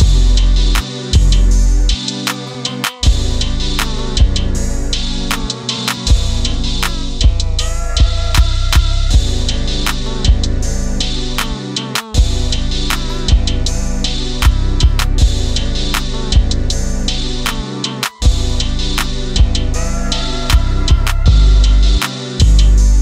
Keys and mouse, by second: 0.4 r, 2.0 click, 2.7 click, 4.1 r, 4.8 click, 5.0-5.5 middle drag, 5.6 click, 5.9-6.3 middle drag, 6.9-7.2 middle drag, 8.2-10.3 drag, 10.8 KP_1, 11.7 KP_3, 12.8 KP_9, 14.0 KP_7, 14.8 KP_1, 15.6 KP_3, 16.7 r, 17.5 click, 17.7-19.1 middle drag, 19.4-20.9 middle drag, 21.7 click, 22.9-23.0 drag.